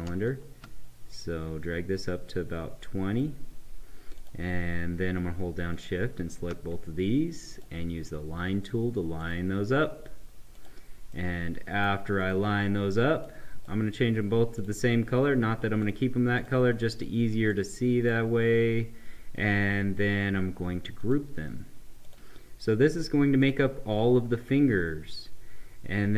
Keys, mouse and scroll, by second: 0.2-4.1 shift+drag, 4.1 click, 5.7 shift+click, 7.5 click, 11.4 right click, 12.1-20.5 drag, 21.0 click.